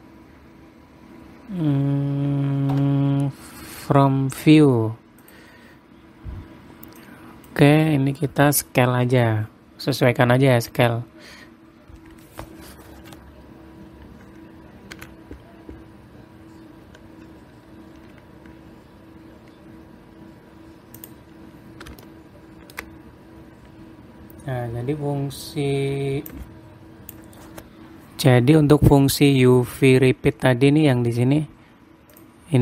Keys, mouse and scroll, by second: 3.3 u, 7.5 click, 11.7-12.8 scroll down 3, 12.8-15.3 scroll down 2, 15.5 s, 22.6 shift+middle click, 23.5-23.8 scroll up 3, 23.8-24.1 scroll down 3, 24.1-24.5 scroll up 3, 24.9-26.5 scroll down 1, 26.8 click, 30.1-30.5 scroll up 5, 30.5-31.0 scroll down 5, 31.3-31.8 scroll down 12.